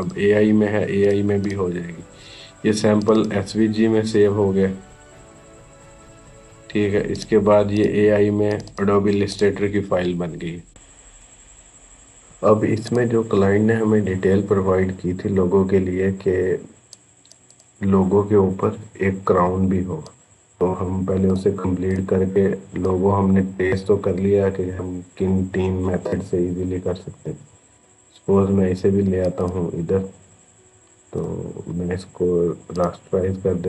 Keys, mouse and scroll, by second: 7.0 click, 12.7 click, 16.7 click, 19.9-29.0 drag, 31.0 right click, 32.5 click.